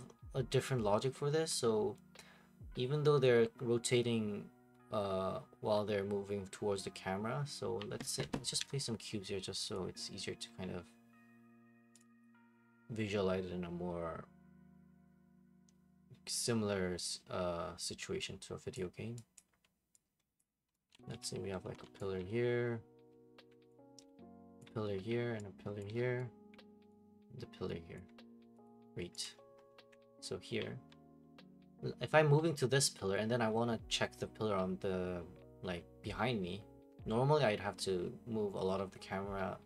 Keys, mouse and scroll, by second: 8.6 Escape, 9.7-11.9 drag, 12.0-14.1 drag, 18.7 click, 19.3 click, 19.5 typing, 20.4 click, 20.6-22.7 typing, 21.0 middle click, 21.1 middle click, 22.0 click, 22.2 right click, 24.6 alt+click, 25.8 alt+click, 26.2 click, 28.0 right click, 28.0 alt+click, 28.6 click, 29.3 alt+click.